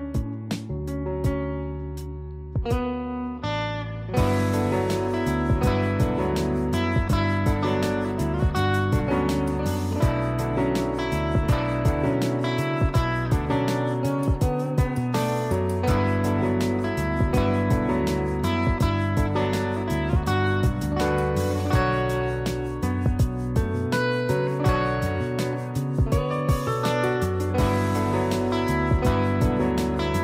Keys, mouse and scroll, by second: 1.3 ctrl+shift+e, 3.5 ctrl+shift+a, 8.3 click, 8.9 j, 9.3 click, 16.7 click, 19.0 click, 19.2 click, 20.4 ctrl+shift+a, 24.8 click, 29.8 click.